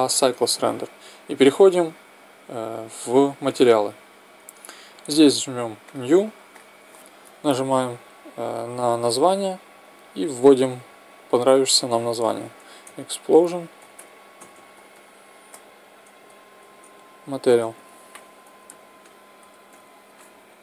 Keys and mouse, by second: 14.5 s.